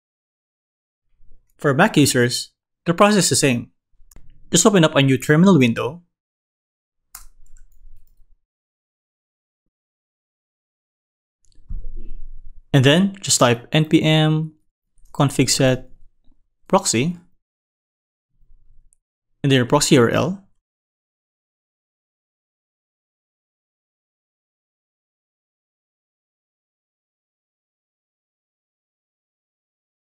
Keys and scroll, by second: 7.1 super+space.